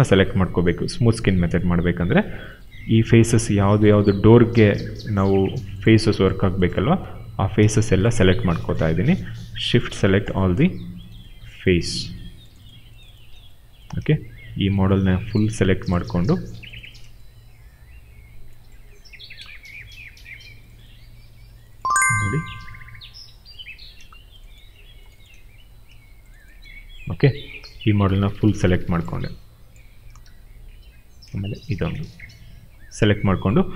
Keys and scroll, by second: 7.2 q, 27.8 w, 30.2 ctrl+z, 32.8 ctrl+z.